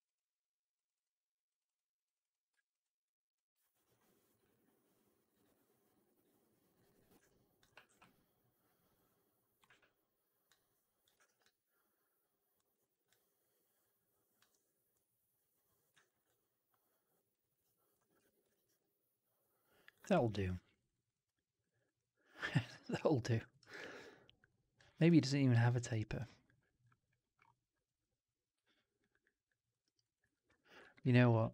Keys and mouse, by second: 0.7 click, 0.8 click, 1.4 click, 1.6 click, 2.0 click, 2.1 click, 2.7 alt+right click, 3.2 alt+click, 3.5 alt+right click, 4.2-6.8 drag, 7.1 alt+click, 7.7 r, 9.6 w, 11.1 right click, 11.3-12.5 drag, 12.6 alt+right click, 13.0-14.3 alt+drag, 15.9 alt+right click, 16.1 alt+click, 17.2 alt+right click, 17.4 alt+right click, 17.6 alt+click, 18.1 4, 18.3 right drag, 18.5 right drag, 18.7-19.8 drag, 19.9 right drag, 20.1 right drag, 20.3 drag, 20.7 right drag, 20.8 right click, 21.0-21.5 alt+drag, 21.5 alt+right drag, 21.7 alt+right drag, 21.9-23.3 alt+drag, 23.4 alt+right click, 23.6 alt+right click, 23.8-24.7 alt+drag, 24.8 alt+right drag, 24.9 alt+right drag, 25.1-25.6 alt+drag, 25.6 alt+right drag, 25.9 alt+right drag, 26.1 alt+drag, 28.9 alt+click, 29.1 alt+click, 29.6 alt+middle click, 29.7 alt+right click, 29.9 alt+right drag, 30.1 alt+click, 31.2 ctrl+z, 31.2 ctrl+z.